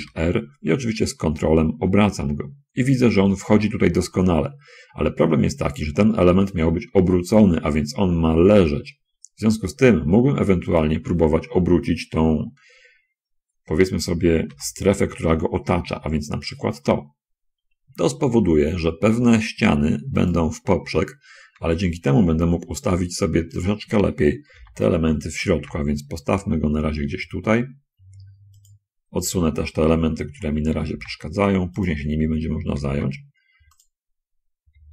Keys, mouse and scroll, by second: 0.1 r, 10.7 ctrl+click, 14.9 l, 16.4 r, 20.6 ctrl+click, 21.9 g, 23.9 click, 24.9 shift+l, 25.7 g, 28.7 click, 31.1 l, 31.3 g, 31.9 click, 33.1 l, 33.1 g, 34.1 click, 34.7 l.